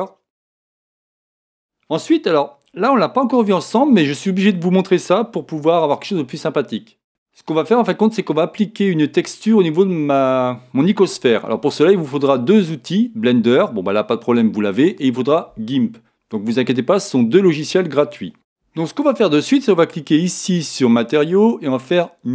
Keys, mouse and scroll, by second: 0.4 scroll up 1.